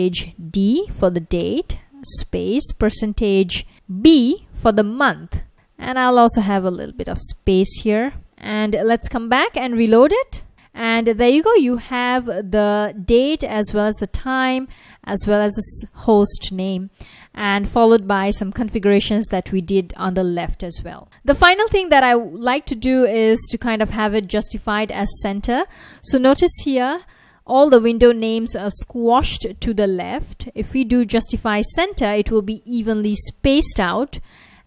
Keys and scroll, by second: 0.2 shift+5, 1.3-2.0 typing, 3.2-4.5 typing, 6.5 space, 7.3 super+s, 8.2 super+Tab, 10.2 ctrl+a, 18.0 F1, 21.0 super+Tab, 24.6 Return, 28.0 F1, 30.0 super+Tab, 33.0-34.6 typing.